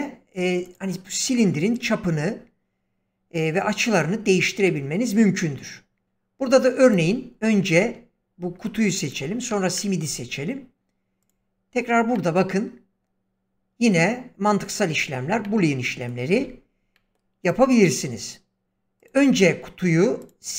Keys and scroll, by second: 16.3 ctrl+z.